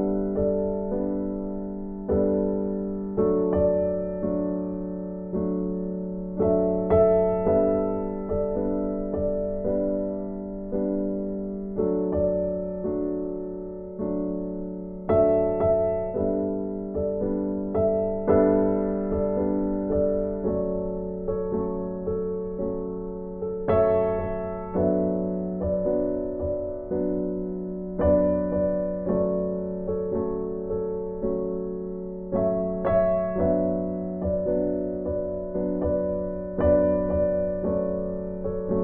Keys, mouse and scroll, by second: 0.4 scroll up 1, 0.7 right click, 1.5 right click, 2.1 scroll up 1, 2.5 right click, 3.6 click, 13.6 click, 19.7 click, 29.9 click, 30.2 right click, 31.0 click, 34.0 right click, 34.7-35.7 scroll up 1, 35.7 click, 38.3 right click.